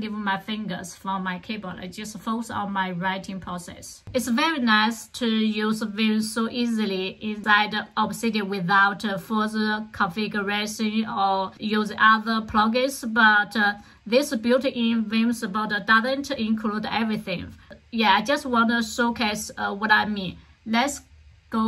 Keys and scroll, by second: 3.0 k.